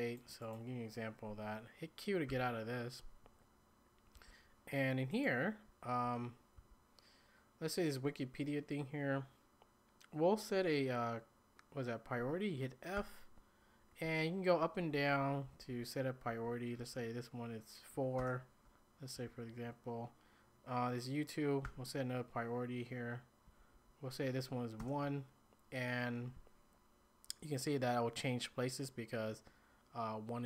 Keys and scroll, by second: 2.3 q, 4.1 k, 6.6 k, 13.0 f, 14.6 Down, 15.0 Up, 15.2 Up, 15.5 Down, 15.7 Down, 16.3 Down, 16.8 Up, 18.2 Return, 19.2 j, 21.6 f, 23.5 Up, 23.7 Up, 24.8 Return, 24.8 typing.